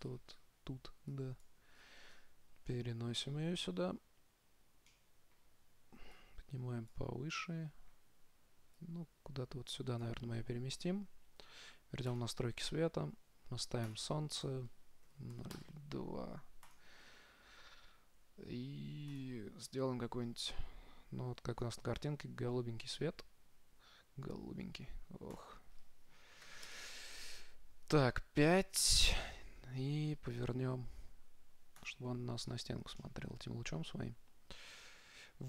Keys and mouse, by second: 1.4-3.0 drag, 3.0 middle click, 6.4-8.1 drag, 7.7-9.3 middle drag, 9.0-10.8 drag, 12.3-14.1 drag, 14.1-16.3 drag, 16.9-18.6 drag, 19.3-21.1 drag, 25.6-27.3 drag, 29.4 KP_7, 30.8 r, 32.4 middle click, 33.6-35.0 middle drag.